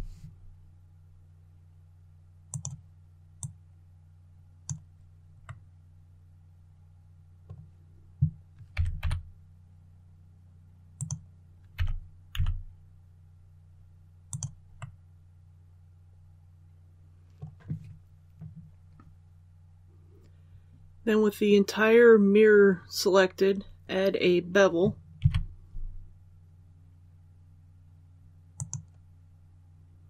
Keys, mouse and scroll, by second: 2.4 click, 5.3-7.6 middle drag, 8.6 typing, 10.8 click, 11.6-12.2 typing, 14.2 click, 14.7-17.6 middle drag, 25.1 ctrl+b, 28.4-29.6 drag.